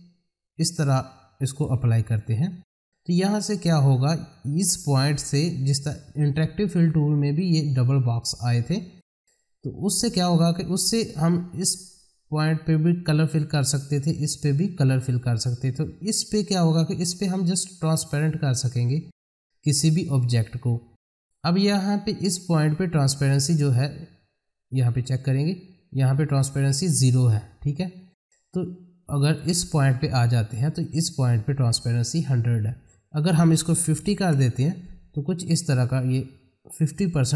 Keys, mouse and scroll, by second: 11.3 click, 16.4-22.2 drag, 22.2 click, 23.5 middle click, 24.7 click, 27.8 click, 28.9-29.3 scroll down 1, 29.3 middle click, 30.1 click, 36.0-37.3 drag.